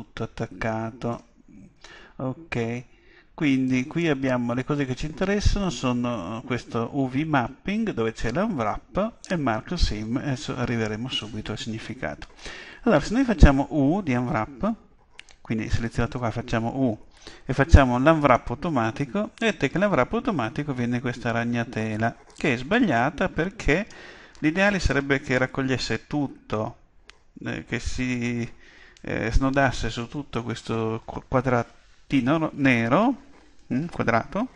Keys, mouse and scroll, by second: 3.7-5.6 drag, 16.2 u.